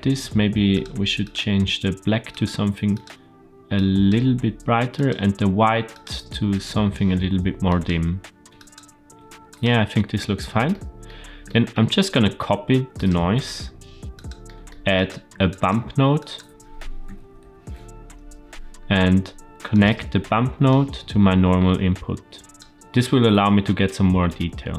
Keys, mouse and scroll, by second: 0.6 click, 1.1 click, 5.9 click, 6.4 click, 9.4 click, 9.7-10.5 scroll down 1, 10.5 scroll down 1, 10.6 shift+middle click, 11.4 shift+middle click, 12.0 shift+middle click, 12.9 click, 13.4 shift+d, 14.4 middle click, 14.9 click, 15.0 shift+a, 20.6-22.5 drag, 22.7-24.7 drag.